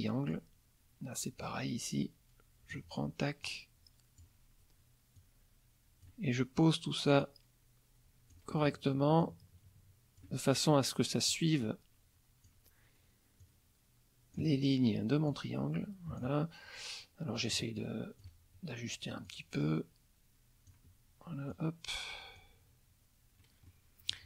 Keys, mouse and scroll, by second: 1.4-2.9 drag, 3.4 click, 5.1 click, 7.2-8.5 drag, 9.2-10.4 drag, 11.3-12.6 drag, 13.4 click, 15.3 click, 17.3 click, 19.2-20.9 drag, 21.5 click, 23.6 middle click.